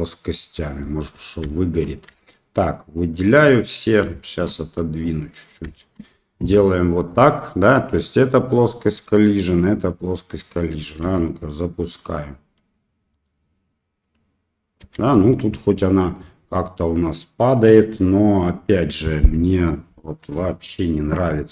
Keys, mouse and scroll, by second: 0.5 middle click, 1.5 shift+middle click, 2.2 shift+click, 3.1 shift+click, 3.7 shift+middle click, 5.1 click, 5.7 shift+middle click, 6.8 click, 9.0 click, 10.3 middle drag, 11.0 space, 11.2 c, 14.8 space, 15.0-15.3 middle drag, 15.8 middle drag, 16.5-17.6 middle drag, 20.0 middle click.